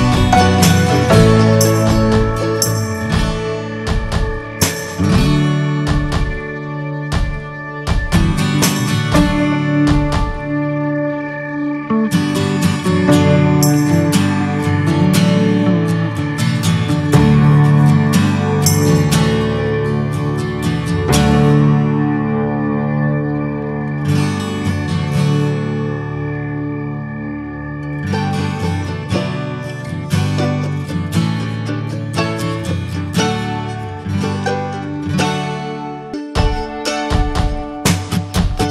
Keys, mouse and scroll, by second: 1.2-3.9 drag, 4.5-5.3 scroll down 6, 4.6 middle click, 5.3 middle click, 5.5 scroll down 2, 5.8 shift+middle click, 6.3-6.9 scroll up 3, 6.9 shift+middle click, 7.3 scroll up 2, 7.5-9.3 middle drag, 9.3-15.5 drag, 15.5 scroll down 5, 15.8 middle click, 15.9 scroll up 1, 16.0-16.4 scroll down 5, 16.4-18.7 shift+middle drag, 18.7-19.3 scroll up 1, 19.3 shift+middle click, 19.8-20.2 scroll up 7, 20.4-21.4 shift+middle drag, 21.4-29.3 drag, 29.3-30.4 scroll down 7, 29.5 middle click, 30.0 middle click, 30.5 middle click, 31.1-31.4 scroll up 3, 31.4 shift+middle click, 32.1-37.0 shift+middle drag, 37.0-38.5 scroll up 1, 38.5-38.7 middle drag.